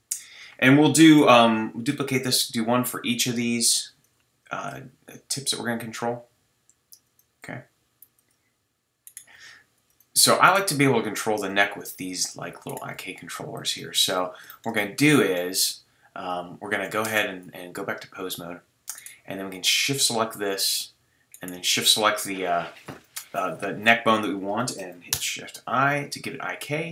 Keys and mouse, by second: 1.9 shift+d, 4.5 shift+d, 7.4 g, 8.3-10.7 drag, 9.3 g, 10.7 g, 12.9 g, 17.0 Tab, 25.1 shift+i.